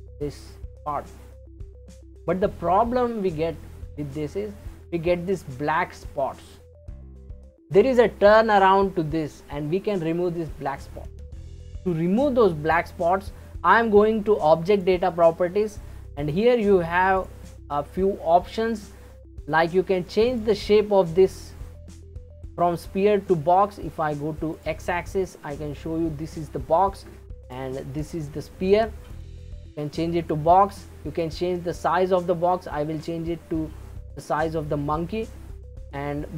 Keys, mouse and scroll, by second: 14.7 click, 15.4-17.2 scroll down 3, 17.2-22.6 drag, 22.6-24.5 middle drag, 24.5 click, 25.3-27.5 scroll down 3, 27.5-34.3 drag.